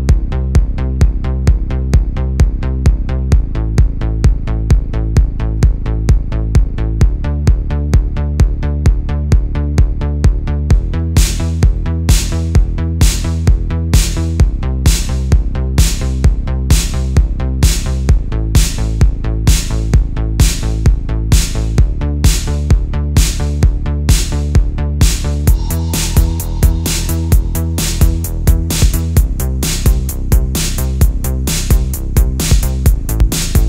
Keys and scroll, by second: 1.1 space, 1.4 space, 2.1 super+Tab, 2.4 super+Tab, 3.6 space, 5.6 space, 6.2 space, 6.6 space, 7.6 alt+super+space, 11.2 space, 12.7 space, 14.1 super+z, 16.3-18.8 typing, 19.2 super+z, 19.9 space, 20.5 super+z, 21.8 space, 24.8 space, 29.1 super+z, 30.1 alt+super+space, 33.0 space.